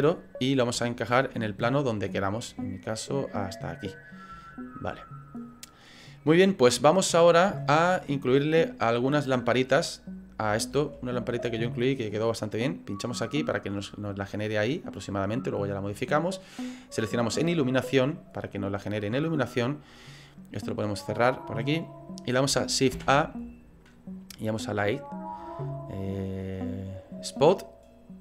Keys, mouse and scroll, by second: 0.4-0.8 scroll down 2, 0.8 shift+middle click, 2.1 click, 4.4 shift+middle click, 7.6 shift+middle click, 8.5-9.4 scroll up 3, 9.4 middle click, 10.5 shift+middle click, 11.0-11.6 scroll up 3, 11.4 middle click, 12.9 click, 13.8 middle click, 14.7 middle click, 16.9 click, 21.0 click, 22.9 shift+a.